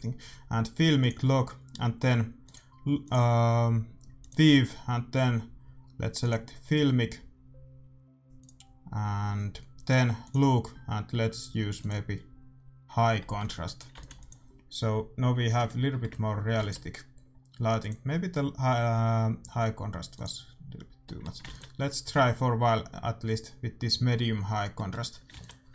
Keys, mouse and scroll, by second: 2.4-6.0 drag, 8.3-12.0 drag, 13.2-15.2 middle drag, 13.8-16.2 drag, 14.0 ctrl+s, 15.7-17.9 middle drag, 16.6 ctrl+s, 17.9-19.8 drag, 21.0-22.8 middle drag, 21.4 ctrl+s, 25.4 ctrl+s.